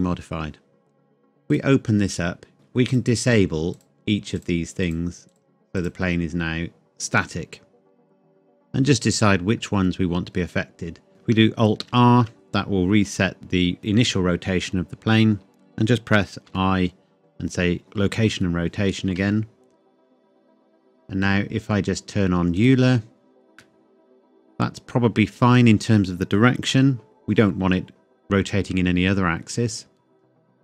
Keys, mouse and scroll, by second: 1.5 click, 2.9 click, 3.0 click, 7.8-8.2 scroll up 1, 8.3 middle click, 9.6 scroll up 1, 11.1 click, 11.8 alt+r, 16.4 i, 17.8 click, 19.1 space, 20.0 middle click, 22.6 click, 23.6 middle click, 26.7 KP_1.